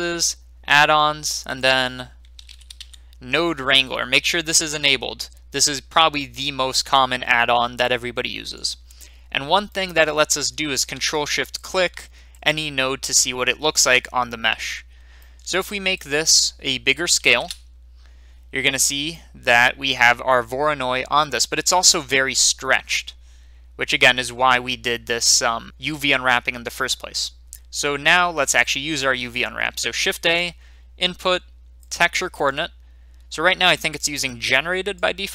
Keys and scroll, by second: 2.3-2.7 typing, 17.1 5, 17.2 0, 17.4 Return, 30.1 a.